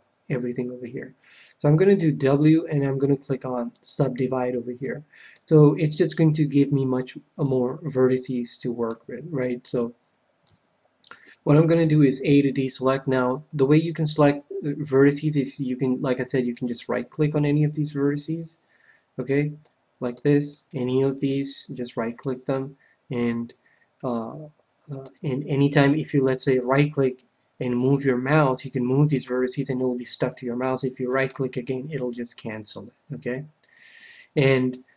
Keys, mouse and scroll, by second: 1.9 w, 5.3-6.8 middle drag, 10.4 KP_1, 11.7 a, 16.3-19.8 right drag, 19.6-21.1 middle drag, 20.3-23.8 right drag, 23.1 KP_1, 24.0-25.8 middle drag, 26.3-28.0 right drag, 33.2 KP_1.